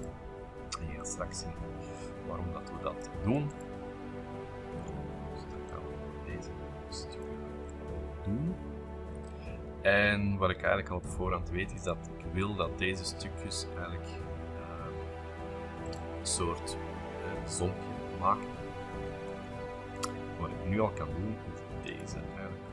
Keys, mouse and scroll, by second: 0.9 s, 2.0-4.3 ctrl+drag, 3.4 space, 4.4 s, 5.7-7.7 drag, 7.7-9.8 middle drag, 9.0-9.8 scroll up 2, 10.1 l, 11.0 click, 11.9 click, 13.0 click, 15.8 click, 19.0-19.9 scroll up 2, 20.0 click, 21.3 m, 21.9 click.